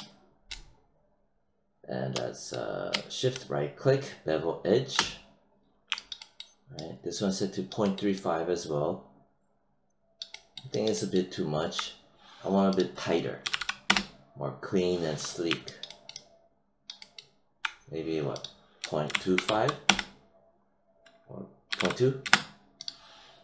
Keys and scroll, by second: 13.4 ., 13.8 Return, 18.7 ., 19.4 5, 19.8 Return, 21.4-22.2 typing.